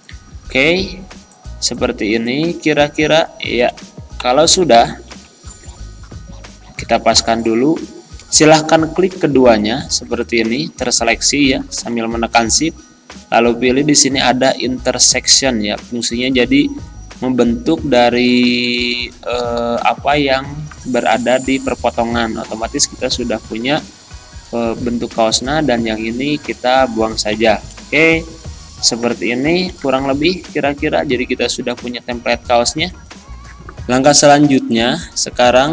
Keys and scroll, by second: 4.2 Right, 4.7 Down, 5.3 Right, 7.2 Down, 11.8 ctrl+z, 27.4 Delete, 29.7 c, 30.1 e.